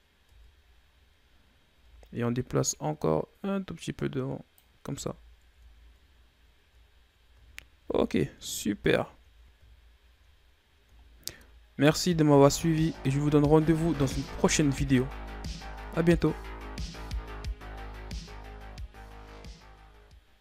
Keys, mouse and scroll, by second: 0.6 Tab, 0.9-1.6 scroll down 2, 1.6-2.0 scroll up 3, 2.0 Tab, 2.9-5.2 drag, 5.2 Tab, 5.4-6.7 scroll down 9, 6.7-7.1 scroll down 2, 7.6-8.0 shift+scroll up 2, 8.0 a, 9.1 shift+scroll up 2, 9.4-10.1 scroll down 3, 10.1-10.8 shift+scroll up 2, 10.8-11.3 scroll down 1, 11.3-12.8 shift+scroll up 1, 12.8-15.9 scroll down 2.